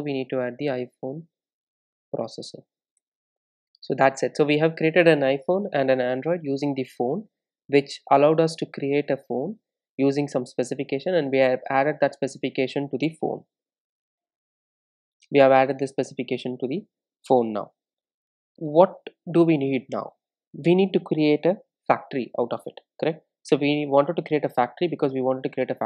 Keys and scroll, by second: 4.1 Return, 14.1 super+e.